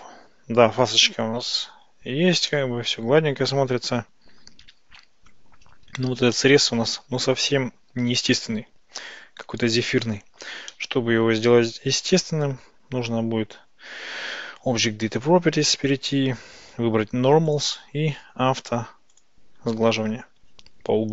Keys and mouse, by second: 2.6-5.4 middle drag, 6.4-10.2 middle drag, 10.8 middle click, 17.5 click, 19.2 click.